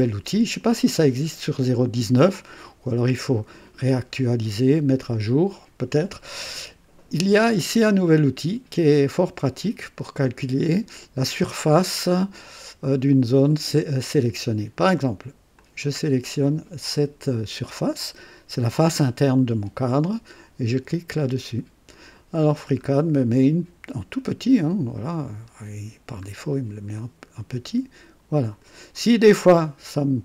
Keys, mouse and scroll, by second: 0.0-0.8 middle drag, 1.0 scroll down 2, 1.7-2.7 middle drag, 15.5 click, 21.1 click, 22.4-22.9 scroll up 1, 23.4-23.8 scroll down 1, 24.9-26.4 middle drag, 27.0-28.8 drag.